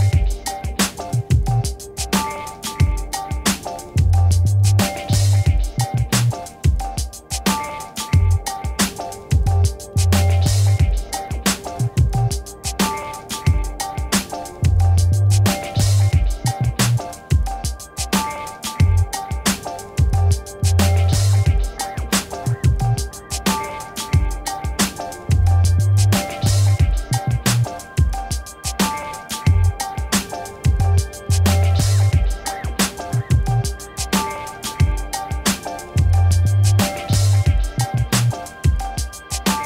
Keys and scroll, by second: 7.9 space, 14.3 s, 15.4 BackSpace, 15.6 e, 16.4 i, 18.0 Return, 32.0 9, 32.7 Return, 35.3 v, 37.1 ctrl+d.